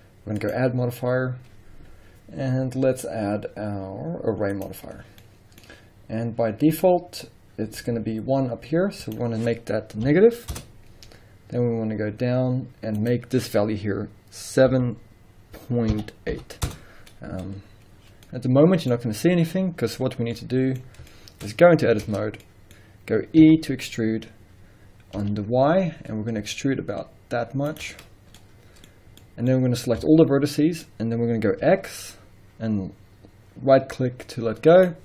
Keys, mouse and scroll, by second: 0.4-5.2 drag, 5.2-9.0 middle drag, 9.0-18.2 drag, 10.6 Return, 16.7 Return, 18.2 scroll down 2, 18.2-21.4 middle drag, 21.4 scroll up 1, 22.0 Tab, 22.4 middle click, 22.8-23.4 scroll up 1, 23.4 e, 27.4 middle click, 27.8 shift+click, 27.9 scroll up 1, 28.4-34.8 middle drag, 30.0 a, 31.6 e, 34.8 right click.